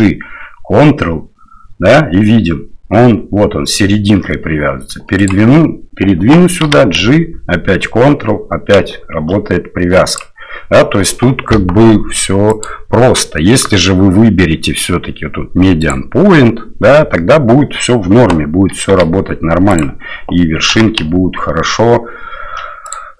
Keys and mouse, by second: 6.6 g, 12.5-15.9 drag, 18.9 g, 20.7 g.